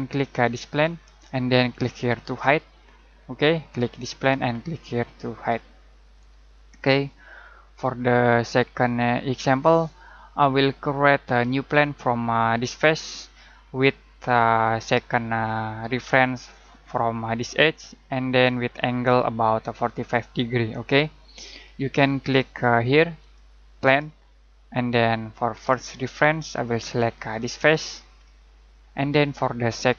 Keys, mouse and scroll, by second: 0.6 click, 3.9 click, 23.2 click, 25.7 click, 27.6 click, 28.2 middle click.